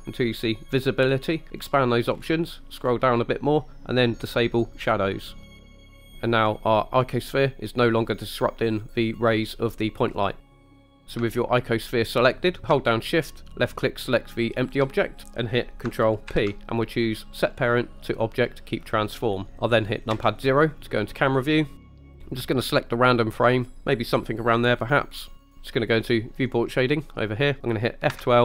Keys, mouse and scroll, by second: 1.7 click, 2.1-2.8 scroll down 3, 2.8-4.1 scroll down 2, 4.8 click, 10.4-10.7 middle drag, 10.9 scroll up 3, 11.4 shift+middle drag, 12.3 scroll up 1, 14.7 shift+click, 16.4 ctrl+p, 20.2 KP_0, 21.4 scroll down 2, 23.3 click, 27.1 drag.